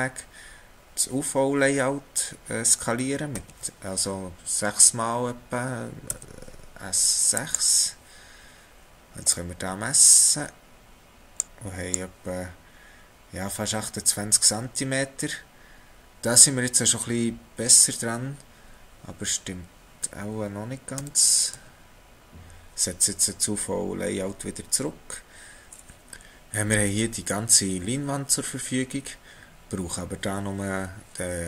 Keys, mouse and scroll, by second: 3.3 s, 9.0 x, 10.2 click, 21.0 ctrl+z, 22.1 ctrl+z, 22.7 ctrl+z, 25.7 middle click.